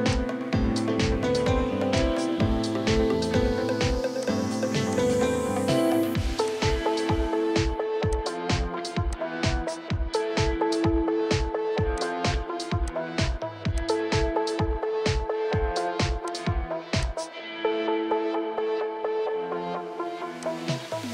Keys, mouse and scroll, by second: 14.6-16.3 scroll up 1, 18.1-19.0 scroll up 1, 19.0 right click.